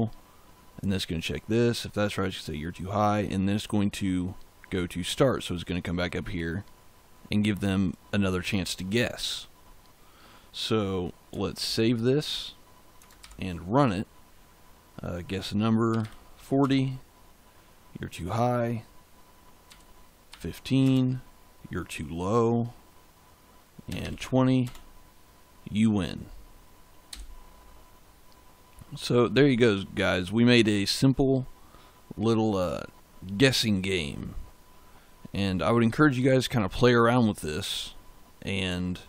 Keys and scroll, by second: 11.5 ctrl+s, 13.1 ctrl+shift+z, 15.5-16.4 typing, 16.5 Return, 19.6 1, 20.1 5, 20.7 Return, 23.5-24.4 typing, 24.5 Return, 27.0 j.